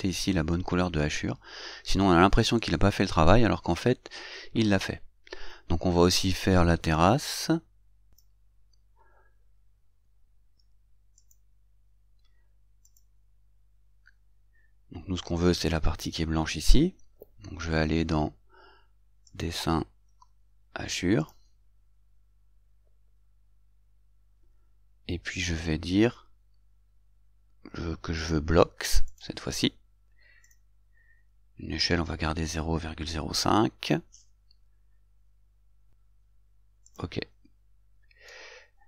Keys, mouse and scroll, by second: 8.4 click, 11.4 click, 13.2 click, 19.6 click, 21.5 click, 29.4 click, 30.8 click, 37.2 click.